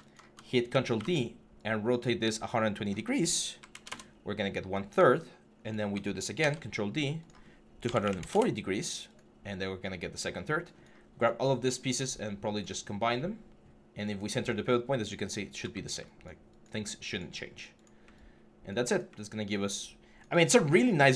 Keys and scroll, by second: 0.5 ctrl+d, 0.8 e, 3.4-3.7 typing, 3.7 Return, 6.2 ctrl+d, 7.7-8.0 typing, 8.1 Return.